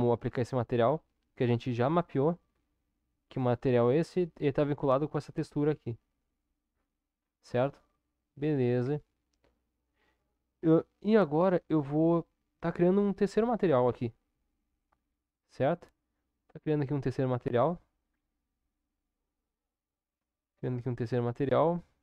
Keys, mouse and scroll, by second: 0.7 click, 3.0-5.0 drag, 8.8 Tab, 10.5 Tab, 17.9-22.0 drag.